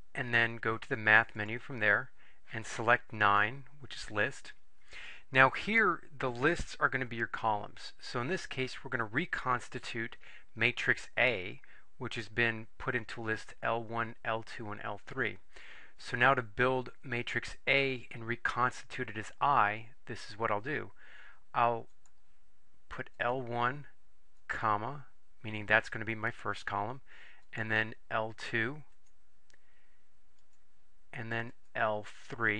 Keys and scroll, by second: 1.5 Right, 3.4 9, 23.3 1, 24.5 ,, 29.1 2, 30.5 ,.